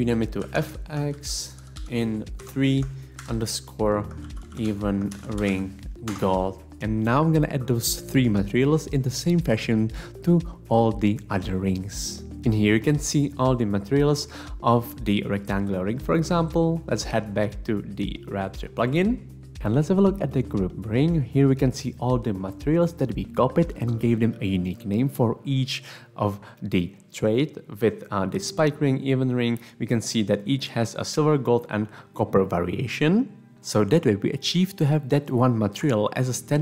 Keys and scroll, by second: 0.0-6.0 typing, 6.1 Return.